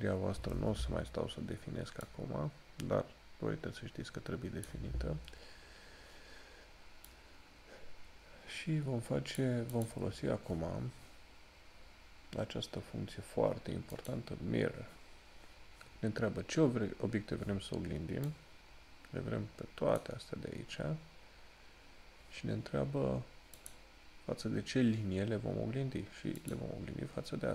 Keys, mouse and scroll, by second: 2.2 click, 7.3 click, 14.1 click, 18.5 click, 23.7 click.